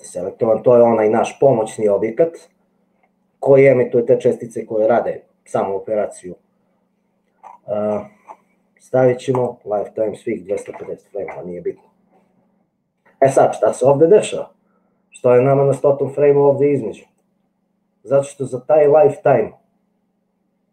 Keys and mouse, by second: 9.4-12.0 drag, 17.5-20.7 drag.